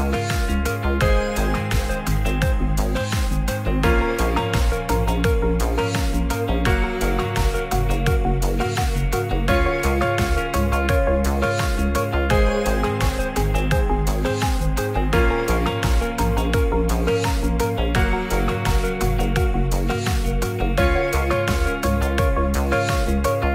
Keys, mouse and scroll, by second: 0.2 click, 1.7 ctrl+a, 4.7 alt+z, 5.5 Tab, 5.9 click, 7.1-8.7 drag, 14.3-16.5 drag, 19.0 middle drag, 21.1 shift+a, 22.6 click.